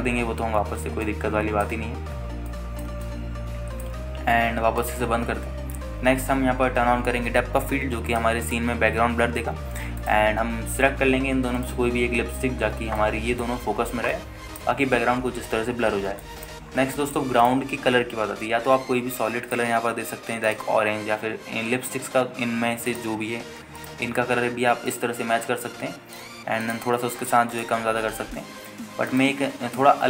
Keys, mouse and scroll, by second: 0.6 click, 1.0-1.8 scroll down 2, 2.2 alt+shift+middle click, 3.2 scroll down 1, 3.7 alt+middle click, 4.2 shift+middle click, 6.0 click, 6.9 n, 7.4-9.0 scroll up 1, 9.3 click, 9.6 click, 12.3 click, 13.1-13.8 scroll up 3, 13.8 scroll up 1, 14.2 alt+shift+middle click, 15.0 scroll down 1, 15.3 alt+shift+middle click, 16.0-16.8 scroll up 3, 17.0 scroll down 2, 17.4 alt+shift+middle click, 17.8 scroll down 2, 18.2 alt+shift+middle click, 18.6 click, 20.7 click, 21.6-22.7 drag, 22.8-24.1 scroll up 2, 24.1 click, 24.1 scroll up 1, 26.5-27.2 scroll down 2, 27.8 click, 28.7 click.